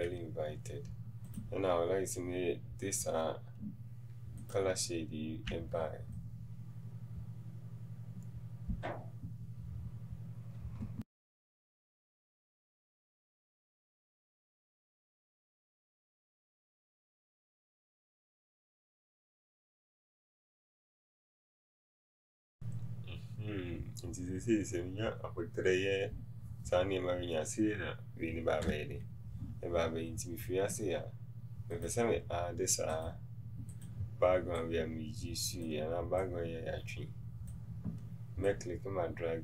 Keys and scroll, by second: 21.7 v.